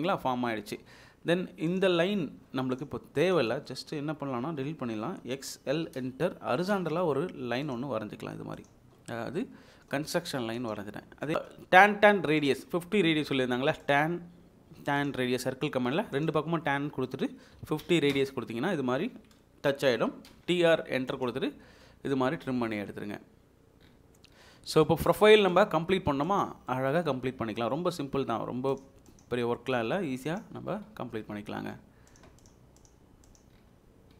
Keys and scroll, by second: 2.2 Escape, 5.1 Delete, 5.7-6.7 typing, 8.7 Escape, 11.3 Escape, 11.3 c, 11.3 space, 11.7 Escape, 17.6 typing, 18.1 Return, 20.0-20.7 typing.